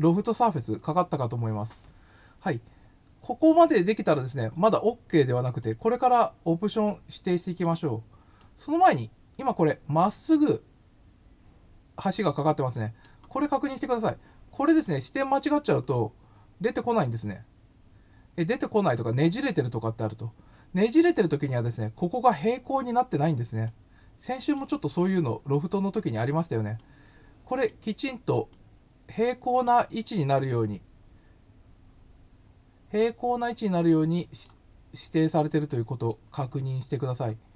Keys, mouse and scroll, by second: 5.6-7.6 drag, 8.3 middle click, 10.7-13.0 middle drag, 14.8 click, 18.3 scroll up 2, 18.7 scroll down 3, 23.6 click, 26.7 click, 28.5-29.6 drag, 33.3-34.4 middle drag, 35.2 middle click.